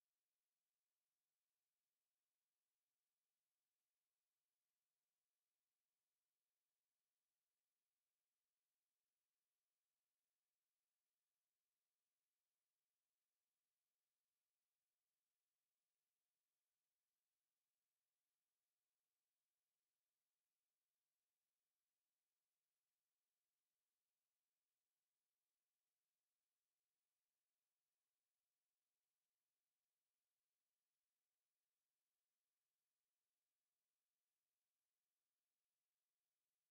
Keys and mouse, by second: 1.0-2.5 drag, 4.0-4.8 drag, 6.2 middle click, 7.1 click, 8.0 middle click, 13.2 middle click, 13.3 KP_7, 15.1 KP_7, 16.4 KP_5, 20.2 click, 20.3 middle click, 23.2 click, 23.9 middle click, 25.1-26.1 drag, 26.7-27.8 drag, 28.5 click, 28.8 click, 29.7-31.5 middle drag, 31.5 KP_7, 32.8 KP_3, 33.9 KP_1.